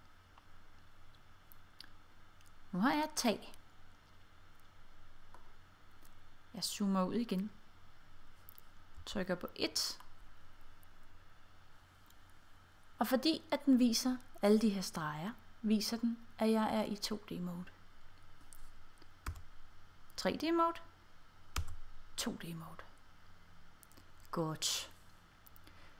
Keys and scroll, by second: 9.0 1, 19.3 5, 21.6 5.